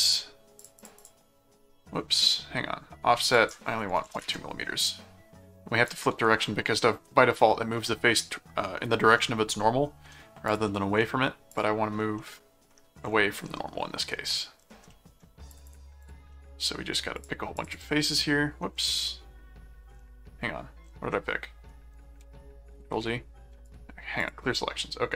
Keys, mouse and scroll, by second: 0.6 click, 3.4 click, 5.9 click, 9.6 middle click, 10.5 click, 10.7 middle click, 11.5 click, 12.2 middle click, 14.9 middle click, 15.5 click, 16.3 middle click, 17.1 click, 21.1 middle click, 22.3 ctrl+z, 23.0 z, 23.6 right click, 24.2 click.